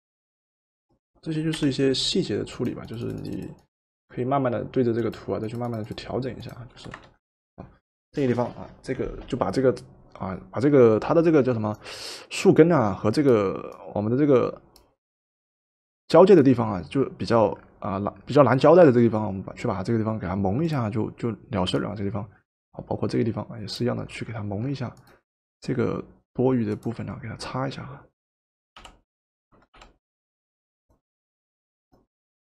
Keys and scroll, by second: 1.5 Return, 6.8 v, 28.8 b, 29.8 b.